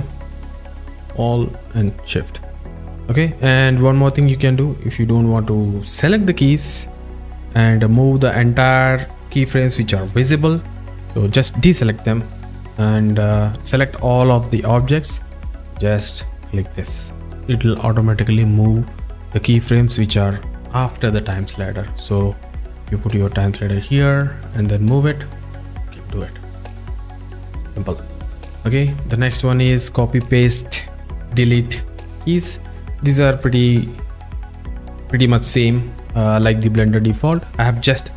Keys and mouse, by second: 0.6 a, 2.8 click, 2.9 click, 13.6 click, 22.1 z, 22.9 click, 24.4 click, 26.2 click, 27.2 z, 28.2 click, 28.9 click.